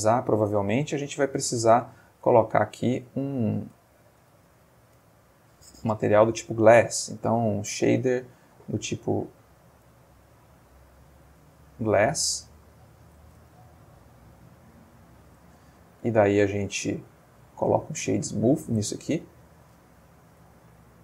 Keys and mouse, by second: 0.9 click, 2.4-3.2 ctrl+middle drag, 3.2-3.7 ctrl+shift+middle drag, 3.9 ctrl+shift+middle click, 4.4 ctrl+shift+click, 5.0 ctrl+x, 5.9 shift+a, 9.2 click, 9.8 click, 10.5-11.4 drag, 11.7-12.8 drag, 13.5-14.6 ctrl+middle drag, 14.7-15.5 ctrl+shift+middle drag, 15.9 right click, 17.4 click, 19.0-19.5 ctrl+middle drag, 20.5-21.0 middle drag.